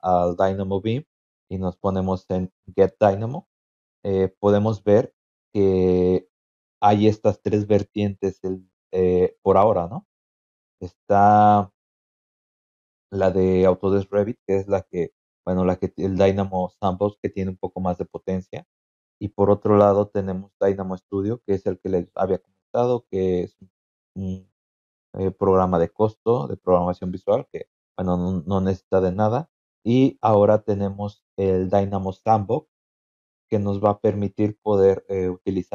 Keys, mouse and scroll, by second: 0.0-1.8 scroll up 1, 1.8 click, 1.8-2.3 scroll up 1, 3.9-4.7 scroll down 3, 4.8-5.2 scroll up 2, 5.5 scroll down 2, 5.9 scroll up 2, 6.4-7.2 scroll down 6, 7.9 scroll down 2, 8.5-9.3 scroll up 4, 9.7-10.2 scroll up 4, 12.6 scroll down 2, 19.4 scroll down 2, 29.1 scroll up 2, 29.7-30.1 scroll up 4.